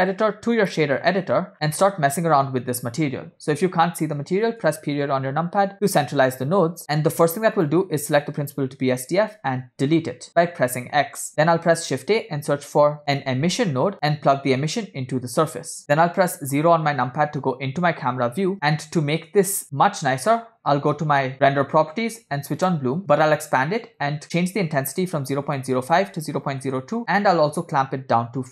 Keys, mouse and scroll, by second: 1.5 scroll down 3, 1.9-3.1 middle drag, 4.7 KP_Decimal, 5.8 middle click, 6.3-6.8 scroll up 3, 6.8 click, 7.0-7.4 middle drag, 7.7 drag, 10.3 x, 11.3 shift+a, 13.5 s, 14.8-15.8 drag, 16.8 KP_0, 18.5 middle click, 21.4 click, 22.9 click, 24.2-26.9 drag, 27.7-28.5 drag.